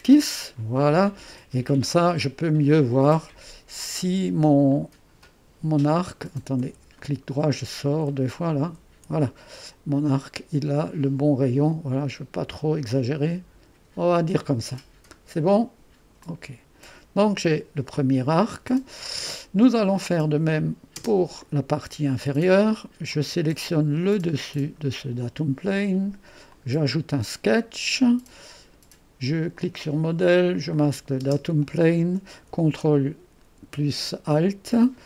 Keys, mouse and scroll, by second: 0.0-6.7 drag, 6.7 Escape, 7.3 click, 7.7 Escape, 8.4 click, 9.0 Escape, 10.1-18.3 drag, 20.6-23.6 drag, 21.0 space, 24.5 click, 26.5-34.3 drag, 31.3 space.